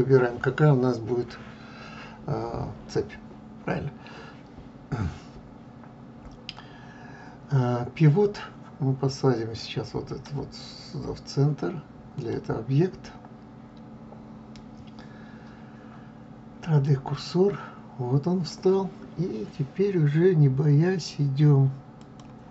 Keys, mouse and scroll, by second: 12.1-15.1 drag, 21.8 click.